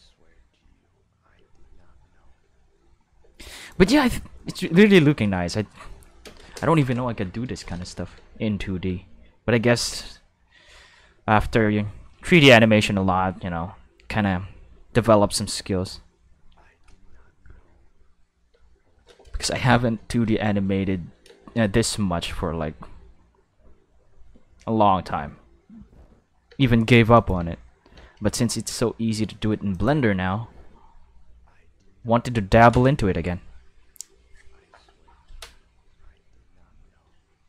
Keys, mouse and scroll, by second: 3.2 space, 3.6 click, 3.9 space, 4.7 q, 5.2 q, 6.0 middle click, 6.2 space, 7.6 space, 8.1 space, 8.9 space, 10.1 middle click, 12.8 space, 14.6 space, 15.0 space, 15.7 space, 17.8 space, 18.5 space, 18.9 space, 21.3 space, 26.5 space, 27.1 click, 27.4 space, 27.9 space, 29.7 click, 30.1 space.